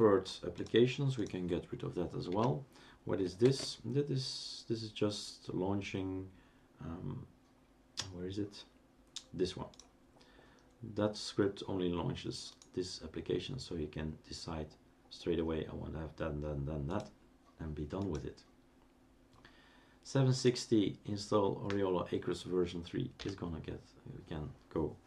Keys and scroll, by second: 2.3 Delete, 3.4 super+space, 23.2 Delete.